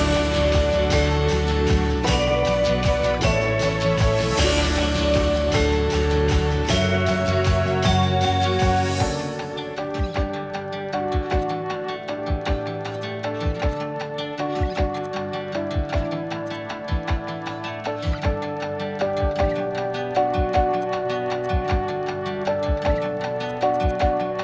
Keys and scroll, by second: 5.4-7.5 typing, 10.1 Escape, 10.1 typing, 12.8 p, 13.1 Escape, 13.5 ctrl+a, 14.0 ctrl+h, 16.2 p, 16.8 Escape, 17.3 h, 20.3 r, 22.1 p, 23.6 space.